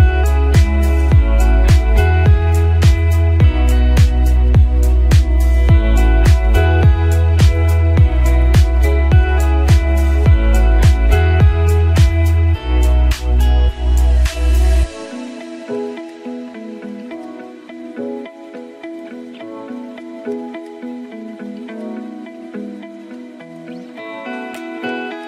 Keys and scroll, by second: 1.6 ctrl+j.